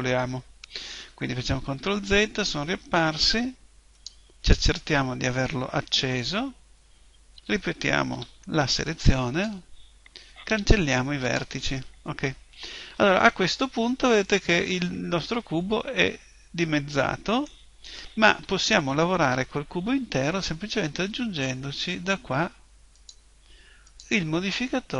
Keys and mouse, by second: 1.6 ctrl+z, 4.0 middle click, 4.8 click, 7.4 a, 8.2 b, 10.5 Delete, 15.8-18.2 middle drag, 18.2 KP_1, 23.0-24.9 drag.